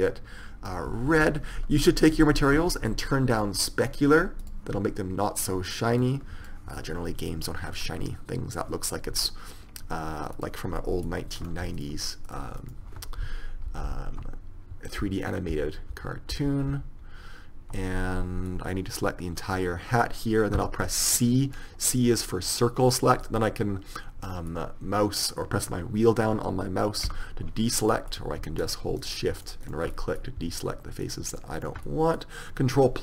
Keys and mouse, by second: 2.2-8.1 drag, 8.1-9.7 middle drag, 9.4 Tab, 11.6 middle click, 12.7-14.7 middle drag, 13.9 ctrl+KP_Add, 18.7 middle click, 20.7 c, 27.9 middle click, 28.8 click, 32.2-33.0 middle drag.